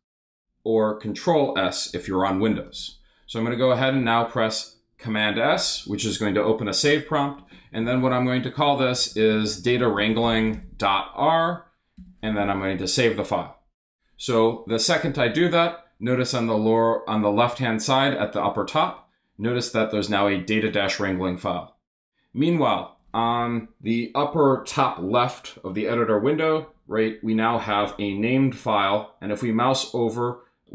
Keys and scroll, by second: 2.5 super+s, 7.4 BackSpace, 8.7-11.0 typing, 12.0 Return.